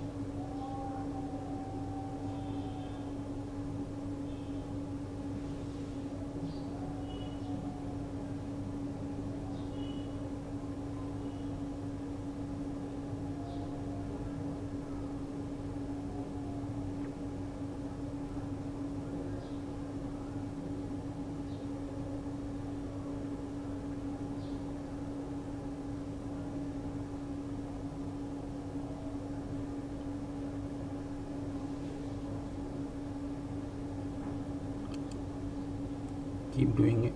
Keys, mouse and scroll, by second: 2.6 click, 6.2 shift+click, 8.5 ctrl+z, 11.0 shift+click, 22.1 shift+click, 26.3 shift+click, 29.4 shift+click, 33.7 click.